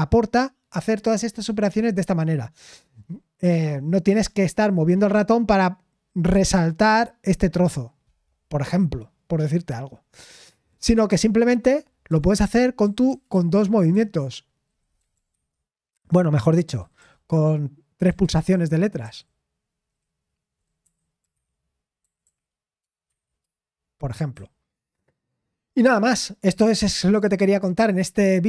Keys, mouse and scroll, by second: 12.8-13.6 typing, 15.0-15.3 typing, 16.8-19.0 typing, 20.8-23.1 typing, 24.3 typing.